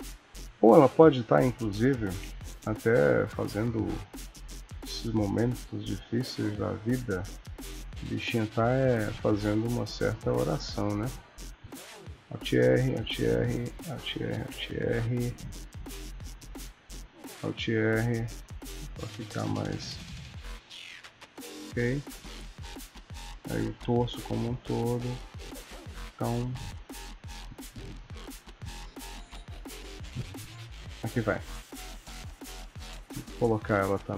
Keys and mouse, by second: 1.3 KP_Decimal, 2.8 click, 3.5 r, 5.1 click, 5.4 r, 8.5 KP_1, 9.9 click, 10.4 r, 12.1 alt+r, 12.6 click, 12.9 alt+r, 13.4 click, 13.8 alt+r, 14.2 click, 14.5 alt+r, 15.7 click, 16.3 click, 17.2 alt+r, 19.3 KP_3, 20.3 click, 20.7 r, 23.1 click, 23.8 g, 25.7 middle click, 27.4 ctrl+s, 28.0 middle click, 28.8 click, 29.6 click, 31.6 ctrl+s, 32.8 click, 33.5 KP_1.